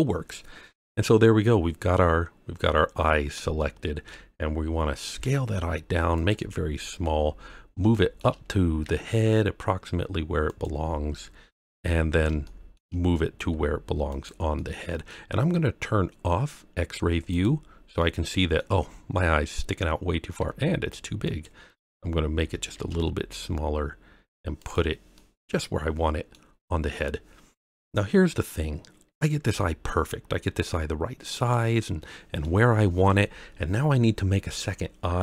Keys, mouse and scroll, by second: 3.5-4.0 shift+middle drag, 5.1 s, 6.1 click, 6.9 KP_3, 7.9 shift+middle drag, 8.8 g, 10.4 click, 11.4 KP_1, 12.0 scroll up 2, 12.4-12.7 shift+middle drag, 13.3 g, 14.1 click, 14.5-15.1 middle drag, 16.0-16.4 scroll down 1, 17.3 click, 18.0-18.5 middle drag, 18.8-19.1 scroll up 2, 20.4 s, 21.2 click, 22.3 g, 22.7 shift+z, 24.5 click, 25.1-26.3 middle drag, 26.6-27.6 scroll down 1, 29.4 s, 31.3 click, 31.8-32.4 middle drag.